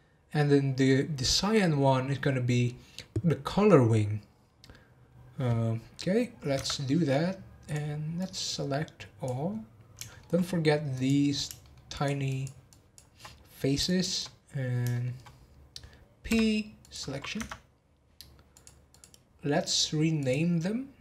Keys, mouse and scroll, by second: 6.5 Tab, 7.6 click, 9.5-10.0 scroll up 2, 10.0 shift+middle click, 10.9 click, 11.6 shift+middle click, 11.9 shift+click, 12.3 shift+click, 13.2 scroll up 2, 13.8 shift+click, 14.2-14.6 scroll down 7, 14.9 shift+middle click, 16.3 p, 18.5 click, 18.9 click, 19.3 scroll down 1, 20.1 click, 20.9 click.